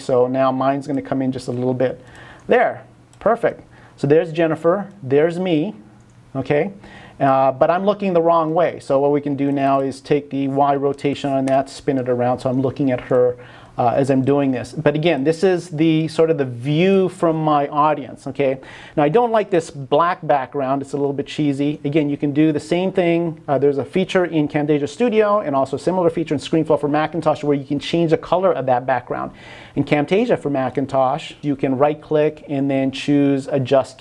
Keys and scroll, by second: 11.5 Return.